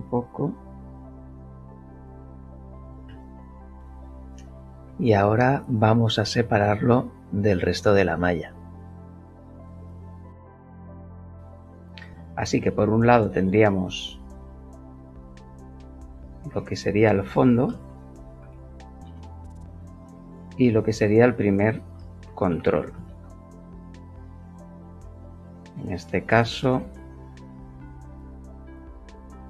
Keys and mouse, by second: 0.3 z, 2.7 KP_0, 3.4 KP_1, 4.0 Return, 4.8 KP_7, 9.0 p, 10.0 click, 11.2 Tab, 11.7 middle click, 12.1 middle click, 12.5-13.0 shift+middle drag, 15.4 shift+click, 15.9 click, 16.0 click, 17.7 shift+f, 18.2 n, 18.4 d, 19.0 Return, 20.5 click, 21.0 click, 21.1 click, 22.2 shift+c, 22.5 shift+t, 22.6 shift+r, 23.1 shift+l, 26.8 Return, 27.7 click.